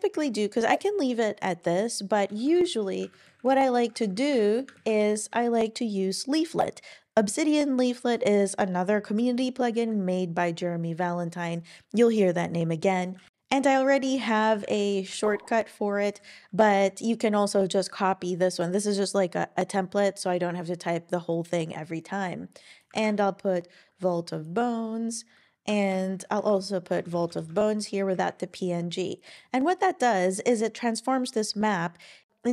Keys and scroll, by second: 2.4 Right, 3.1 shift+super+Right, 3.2 shift+Left, 3.9 super+x, 4.4 super+Right, 4.8 shift+super+Left, 5.0 BackSpace, 14.7-15.0 typing, 23.0 super+v, 25.0-25.9 typing, 26.4 super+v, 26.9 BackSpace, 27.1 BackSpace, 27.3 BackSpace, 28.1 Down.